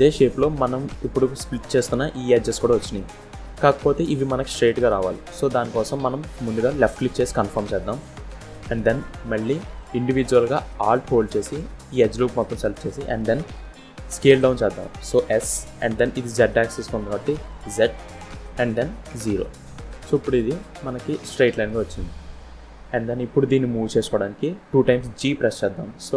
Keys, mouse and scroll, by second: 9.7 click, 11.4 alt+click, 15.3 s.